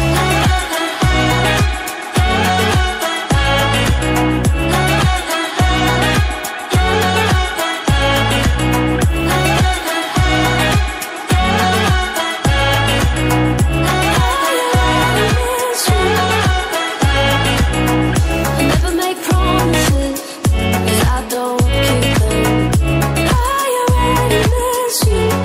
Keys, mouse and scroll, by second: 0.2 scroll up 1, 1.7 click, 5.9 double click, 7.0 click, 10.8 typing, 11.4 click, 17.5 click.